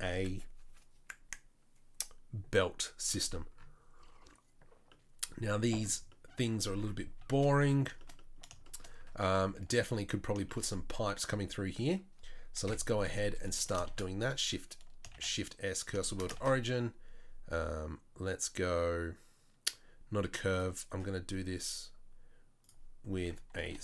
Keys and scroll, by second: 12.6 KP_7, 13.0 z, 13.8 shift+s, 15.1 shift+s, 16.3 shift+a, 23.2 Tab, 23.6 e.